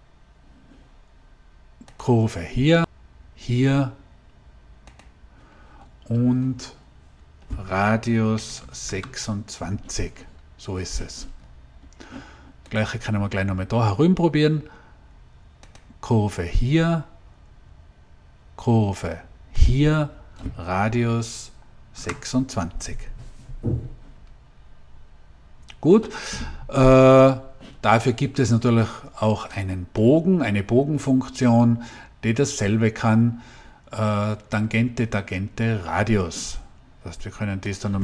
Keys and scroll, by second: 8.2 2, 8.5 6, 8.8 Return, 21.8 Return.